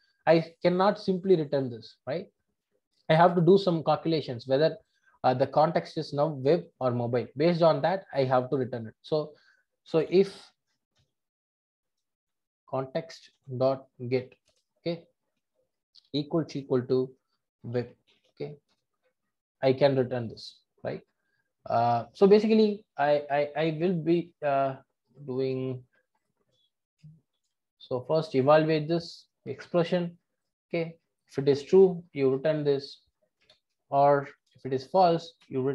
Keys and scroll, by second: 13.7 Return, 18.7 Return.